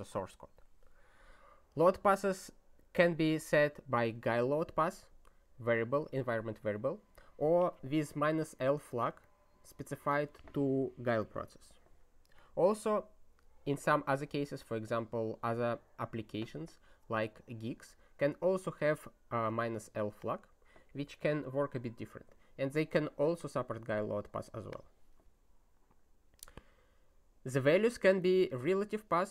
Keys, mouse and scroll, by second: 8.6 click, 9.2 click, 10.2 click, 11.0 click, 11.2 double click, 12.3 click, 18.6 click, 19.5 click, 20.2 click, 22.9 click, 24.4 click, 24.7 click, 28.2 click.